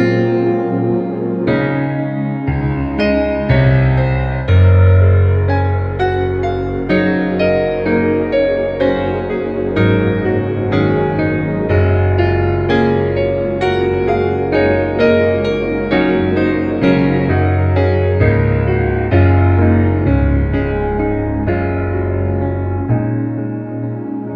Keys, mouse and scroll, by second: 1.3 alt+click, 3.4 space, 3.7 click, 3.8 space, 5.2 click, 7.8 space, 7.9-8.3 click, 8.2 space, 8.9 click, 11.2 space, 11.3 click, 11.4-11.9 space, 11.8 space, 12.1 ctrl+-, 13.4 ctrl+=, 13.7-14.2 space, 14.2 shift+w, 14.5-14.9 drag, 19.4 space, 20.7 ctrl+=, 21.5 l, 22.3 alt+click.